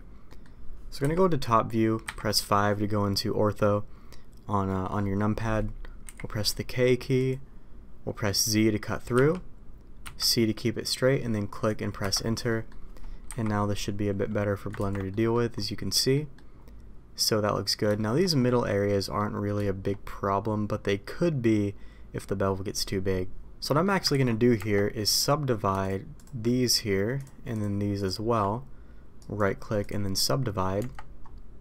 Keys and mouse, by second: 0.2 middle click, 0.9 KP_7, 2.0 KP_5, 6.0 k, 12.4 middle click, 13.2 KP_5, 14.7 ctrl+t, 15.0 middle click, 16.1 middle click, 17.2 middle click, 17.9 shift+middle click, 18.9 middle click, 19.6 shift+middle click, 23.6 middle click, 24.1 ctrl+z, 24.5 Tab, 26.4 shift+middle click, 27.1 click, 30.7 Tab.